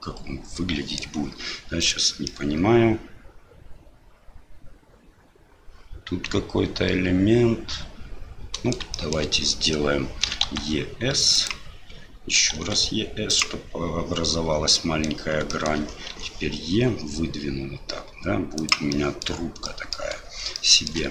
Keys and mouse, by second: 1.8 click, 2.3-8.7 middle drag, 8.9 shift+middle click, 14.9 middle click, 15.6 shift+middle click, 18.9 click, 19.8 click, 20.6 shift+click.